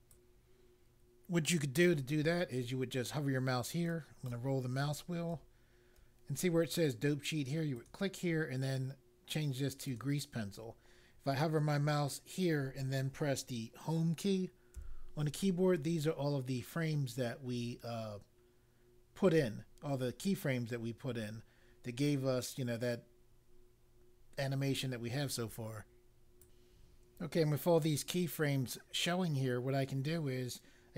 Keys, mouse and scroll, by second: 0.0 click, 3.8-4.8 scroll down 1, 7.8 click, 9.8 click, 14.7 Home, 26.4 click.